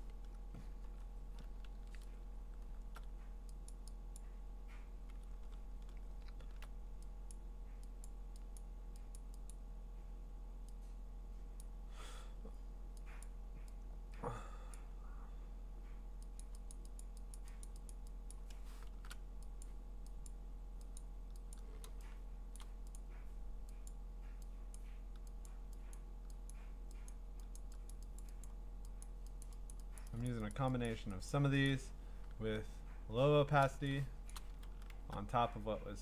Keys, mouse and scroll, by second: 0.6-1.6 ctrl+scroll, 1.6 scroll down 6, 1.7 ctrl+z, 2.1-2.8 ctrl+scroll up 12, 3.7 click, 4.2 click, 5.3-5.7 scroll down 4, 5.7-7.3 scroll, 7.3 click, 8.1 click, 8.6 click, 9.2 click, 9.5 click, 11.6 click, 13.2 click, 13.5 click, 16.7 click, 17.0 click, 17.3 click, 17.8 click, 17.9 click, 18.3 click, 18.9 !, 19.6 click, 20.3 click, 21.0 click, 21.5 click, 22.6 click, 23.9 click, 24.8 click, 25.5 click, 25.9 click, 26.5 click, 27.1 click, 27.6 click, 27.9 click, 28.2 click, 28.5 click, 29.0 click, 29.4 click, 29.7 click, 30.0 click, 30.3 click, 30.5 click, 30.9 click, 31.3 click, 31.7 click, 34.3 click, 34.6 click, 34.8 scroll.